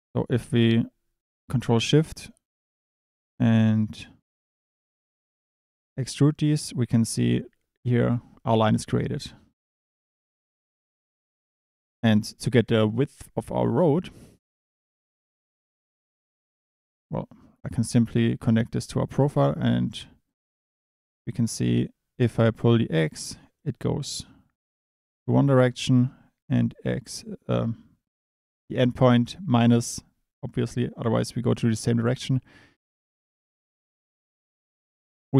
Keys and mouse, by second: 0.1 click, 1.6 ctrl+shift+click, 3.8 click, 5.2-6.6 drag, 9.5-10.8 drag, 11.2 click, 15.1-16.2 drag, 17.6 Delete, 20.3 click, 22.6 click, 26.5-28.7 drag.